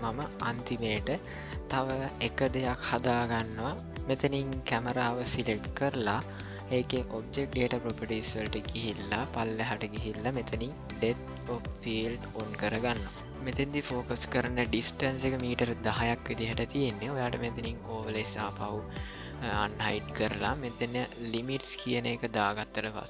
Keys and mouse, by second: 4.4 click, 12.3 click, 18.4 click, 21.5 click.